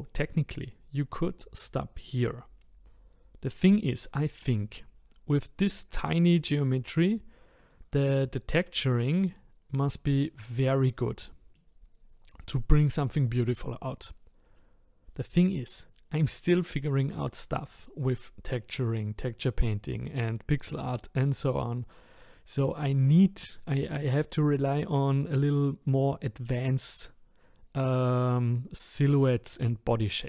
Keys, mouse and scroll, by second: 7.6 click, 10.9-14.1 middle drag, 23.0-26.2 middle drag.